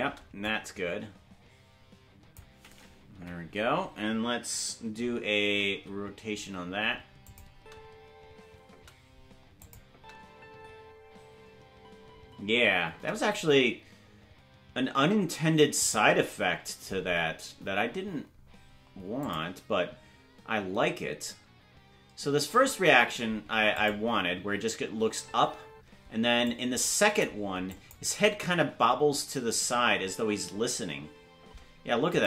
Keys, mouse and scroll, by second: 0.4-2.4 drag, 0.4 space, 3.2 Left, 5.8 alt+r, 7.3 click, 7.5 space, 9.6 click, 9.6 space, 9.9 space, 13.8 space, 15.8 click, 17.6-17.9 scroll up 2, 19.2 click, 22.3 space, 23.8 click, 23.8 space, 25.0 space, 25.7 space, 26.5 click, 27.7 click, 29.7 space, 32.1 click, 32.1 space.